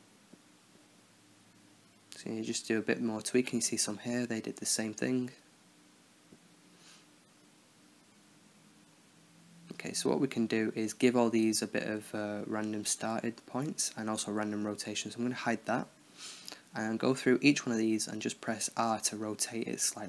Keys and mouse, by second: 1.1-1.7 drag, 3.2-3.9 right drag, 3.9 middle click, 4.1 right click, 4.5 middle click, 5.3-6.6 right drag, 6.6-7.1 drag, 7.7-8.5 right drag, 8.7-9.2 middle drag, 9.2-11.8 drag, 11.8-12.8 right drag, 12.9 r, 14.3-15.3 middle drag, 14.8 h, 15.3 KP_1, 17.2-18.7 middle drag, 18.7-19.6 right drag, 19.2 r.